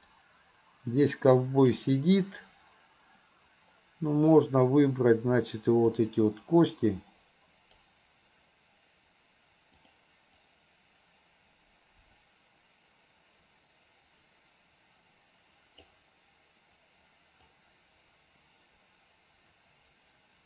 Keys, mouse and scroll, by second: 0.2-1.9 drag, 5.9-7.9 drag, 9.9 click, 10.5-16.1 drag, 17.6-20.4 drag.